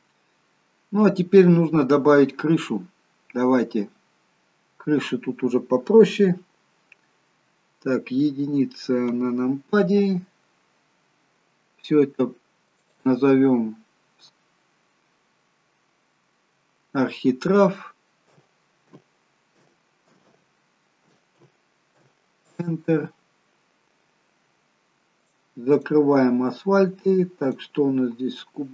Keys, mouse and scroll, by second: 4.2-4.7 scroll down 1, 9.2 KP_1, 12.7 click, 13.0 click, 25.4 click, 25.9 click.